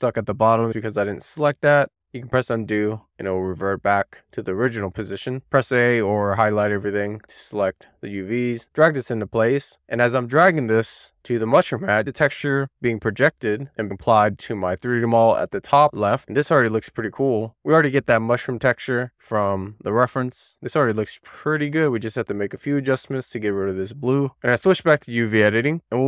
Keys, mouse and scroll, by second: 1.4 super+z, 3.4-5.7 drag, 8.4 click, 19.0-23.2 middle drag, 24.3 click, 25.4 middle click.